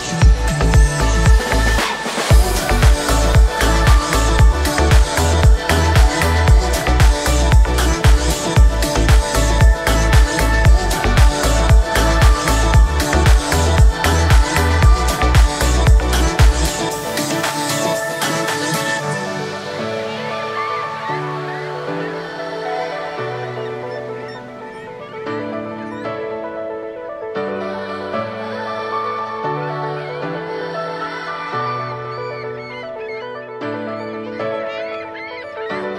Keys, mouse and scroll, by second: 0.3 right click, 1.7 click, 2.5-4.4 drag, 4.4-4.8 scroll down 3, 4.8-5.8 middle drag, 5.8 right click, 6.1-6.6 scroll down 1, 6.6 scroll up 2, 6.9-7.3 middle drag, 7.3 right click, 7.7 space, 8.3 g, 9.7 space, 10.0 right click, 10.6-12.6 scroll down 8, 12.6-13.8 scroll down 3, 13.8-14.2 scroll down 4, 14.2-16.6 scroll up 7, 16.6 right click, 17.1 right click, 18.1 click, 18.9-19.6 middle drag, 19.6-20.2 scroll down 3, 20.2-20.7 scroll up 2, 20.7 space, 21.1 g, 27.9 space, 28.1 right click, 28.5-29.7 scroll down 2, 29.7-32.7 drag, 33.5-34.5 scroll up 2, 34.5 click.